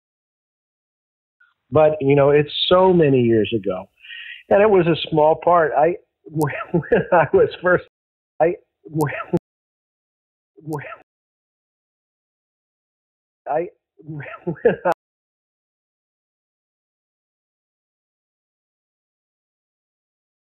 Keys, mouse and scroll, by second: 1.2 click, 1.3 space, 2.8 click, 3.3-4.3 drag, 5.1 click, 5.9 click, 6.6 ctrl+s, 7.3 space, 7.6 click, 7.8 space, 8.2 click, 8.3 space, 9.3 space, 9.6 click, 9.8 click, 10.5 space, 10.9 space, 11.6-12.6 shift+drag, 13.3 click, 13.4 space, 14.8 space, 15.0 click, 15.3 click, 16.6 ctrl+s, 17.5 click.